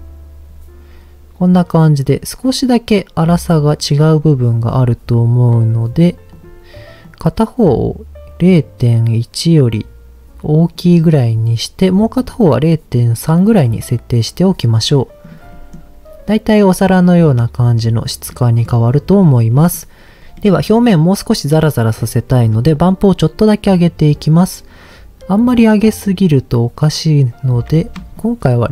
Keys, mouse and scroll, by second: 4.7 click, 5.5 click, 5.9 click, 6.3 click, 11.2 click, 11.8 click, 12.1 click, 15.2 click, 15.5 middle click, 16.6 middle click, 18.3 middle click, 19.5 middle click, 20.2 ctrl+z, 20.3 middle click, 21.9-22.7 scroll up 3, 22.7-27.5 shift+drag, 28.1-28.7 shift+drag.